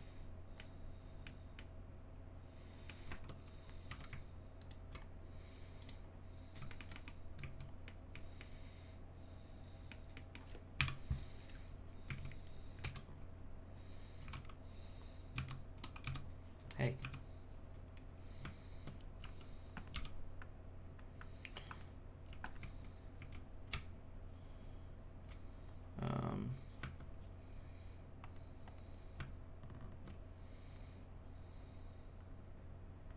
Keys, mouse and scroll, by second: 0.6-3.1 middle drag, 3.1 Tab, 3.5-3.9 scroll up 1, 3.9 1, 4.6 alt+right click, 5.8 click, 6.7 shift+middle click, 7.4 z, 7.8-10.8 middle drag, 10.8 KP_1, 12.1 z, 12.8 z, 14.2 KP_3, 14.3 KP_2, 16.0 KP_3, 18.4 Tab, 19.9 g, 20.4-22.3 drag, 22.6 z, 23.2 z, 23.7 space, 26.8 Tab, 28.2 click, 29.2 Tab, 32.4-33.1 drag.